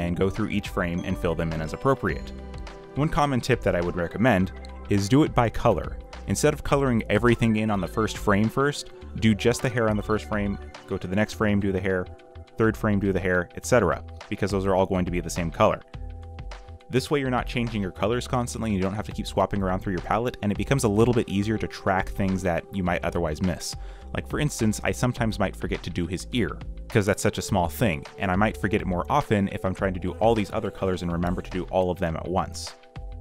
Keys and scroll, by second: 0.0-1.9 typing, 4.0-7.6 typing, 8.3 alt+Delete, 8.6-12.9 typing, 8.8 alt+Delete, 15.0 ., 15.7 ., 19.4-22.0 typing, 24.7 ., 26.3 ., 27.7-29.1 typing, 30.4-33.0 typing.